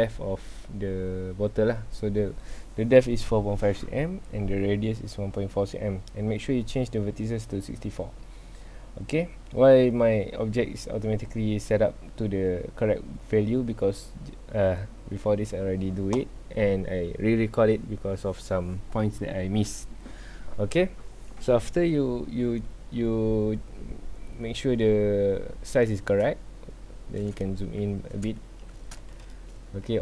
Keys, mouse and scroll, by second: 26.7-27.5 scroll up 2, 27.5-27.8 shift+middle drag, 27.8-28.4 scroll up 2, 28.4 shift+middle drag, 28.7-29.1 scroll up 2, 29.1-29.9 shift+middle drag, 29.9-30.0 scroll down 2.